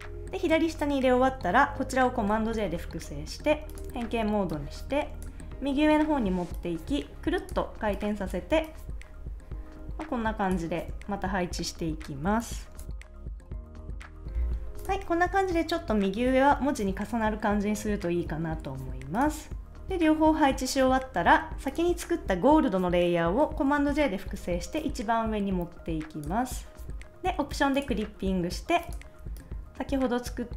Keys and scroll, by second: 2.2 super+j, 12.8 Up, 13.4 Return, 13.5 Left, 13.7 shift+Up, 14.0 Right, 14.2 super+s, 23.8 super+j.